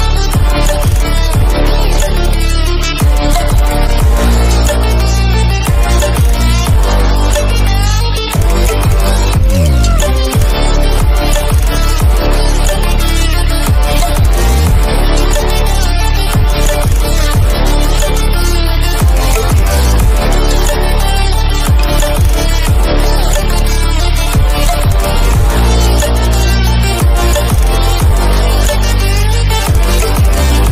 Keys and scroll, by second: 5.0 ctrl+=, 6.4 ctrl+-, 14.3 ctrl+=, 14.7 ctrl+-, 16.1 ctrl+=, 18.0 ctrl+-, 19.2 ctrl+=, 20.3 ctrl+-, 27.9 ctrl+-, 27.9 ctrl+=.